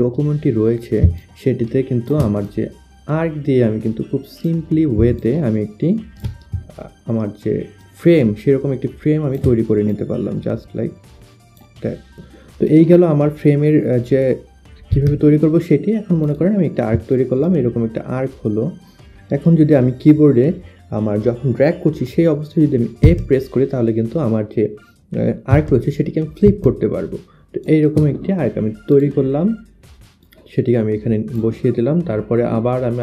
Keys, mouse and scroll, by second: 1.0 alt+click, 2.5 click, 5.3 alt+click, 7.8 shift+click, 10.0 click, 11.5 click, 12.7 click, 13.6 click, 13.8 click, 15.0 Delete, 15.2 click, 16.3 click, 17.2 click, 23.1 shift+f, 25.6 shift+f, 26.6 click, 26.6 shift+f, 28.0 shift+click, 29.8 shift+click.